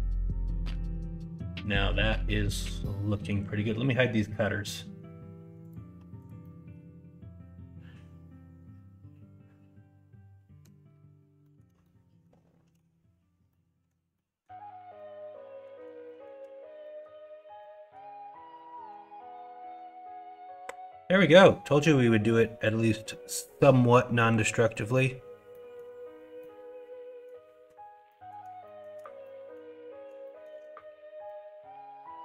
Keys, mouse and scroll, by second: 2.3 middle click, 3.1 middle click, 6.4-10.6 middle drag, 11.4 middle click, 11.8 shift+middle click, 13.4-13.8 middle drag, 14.1-14.4 middle drag, 15.0-15.6 middle drag, 16.0 shift+middle drag, 16.8 middle drag, 17.6-17.9 middle drag, 18.5-18.9 middle drag, 19.3-21.4 middle drag, 22.4-22.8 middle drag, 23.0 shift+middle drag, 23.6 middle drag, 24.7 middle click, 25.5 middle drag, 26.3-27.2 middle drag, 28.0 middle drag, 28.6 shift+middle drag, 29.2-29.5 middle drag, 30.2 shift+middle drag, 31.2-32.2 middle drag.